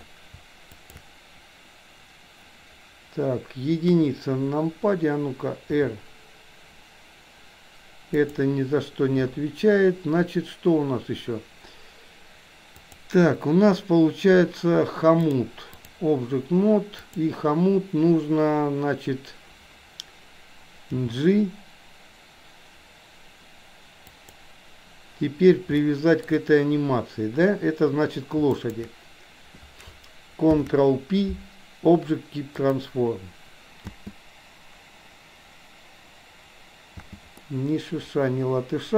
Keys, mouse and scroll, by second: 0.8 shift+click, 4.0 KP_1, 5.7 r, 12.8 click, 15.2 click, 17.1 click, 21.1 g, 25.8-26.3 shift+middle drag, 28.6 shift+click, 30.5 ctrl+p, 34.0 space, 37.0 space, 37.5-38.9 middle drag.